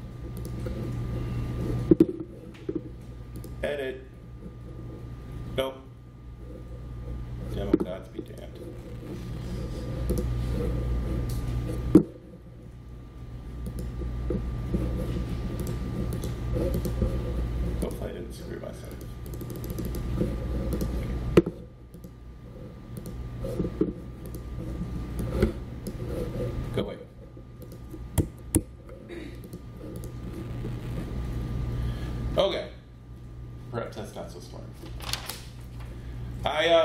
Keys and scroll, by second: 28.0 Escape, 28.4 Escape.